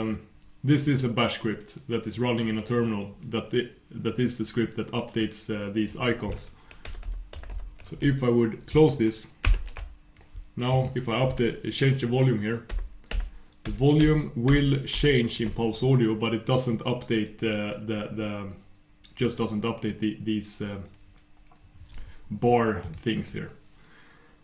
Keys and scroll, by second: 9.5 super+\, 12.7 super+\, 14.9 super+\.